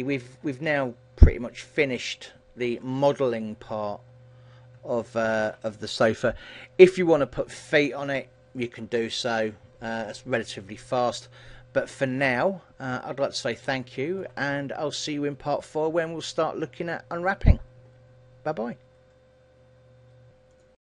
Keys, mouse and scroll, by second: 0.2 shift+middle click, 0.6 middle click, 3.5 KP_1, 4.5-5.1 scroll up 1, 5.1 shift+middle click, 5.1-5.6 scroll up 2, 12.6-13.9 scroll down 3, 13.1 middle click, 13.9 shift+middle click.